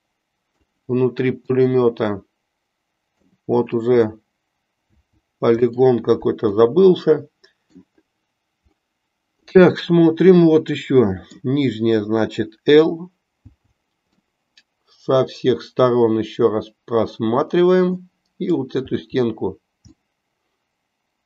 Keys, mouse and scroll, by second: 1.7-3.4 middle drag, 4.9 l, 5.8 middle click, 6.7-7.8 middle drag, 10.7 middle click, 13.4 l, 14.3-18.2 middle drag, 19.2 l, 20.2-21.2 middle drag.